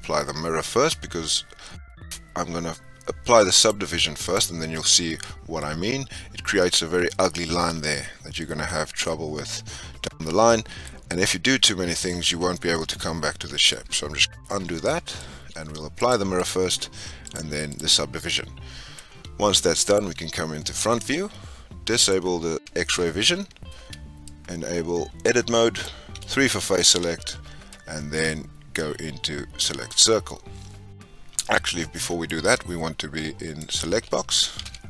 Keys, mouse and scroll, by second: 3.5-4.8 drag, 4.8 scroll up 2, 5.0-5.6 middle drag, 5.6 scroll up 2, 8.6 scroll down 1, 8.6-11.6 middle drag, 12.7-14.2 middle drag, 14.2 ctrl+z, 14.8-15.9 shift+middle drag, 15.9-18.2 drag, 18.2-19.8 middle drag, 19.8 click, 20.4 scroll up 2, 20.9-21.9 shift+middle drag, 21.9 click, 22.8 Tab, 23.3 scroll up 2, 24.2-26.8 drag, 26.8 3, 27.7-30.7 drag, 32.0 click, 32.4-34.5 drag, 34.5 1.